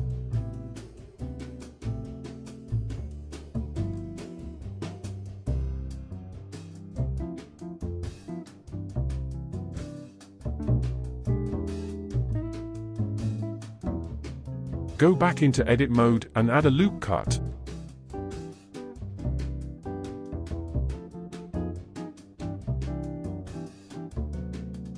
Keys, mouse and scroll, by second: 0.8-1.3 scroll up 2, 1.3-2.0 scroll down 3, 2.0-3.0 middle drag, 3.0-6.7 scroll up 5, 6.9-9.6 drag, 9.6 0, 13.0-14.1 scroll down 3, 14.1-15.5 middle drag, 16.1 Tab, 17.4 ctrl+r, 21.1 scroll down 1, 21.2-24.2 middle drag, 24.4-24.9 shift+middle drag.